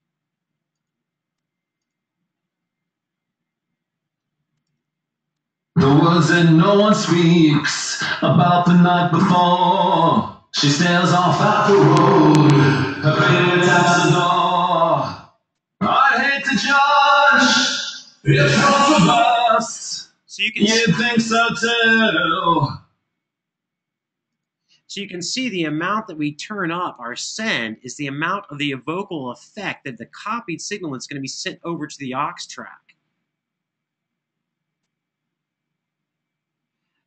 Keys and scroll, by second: 7.6 super+=, 17.2 space, 20.4 space, 22.5 super+=, 25.2 super+=.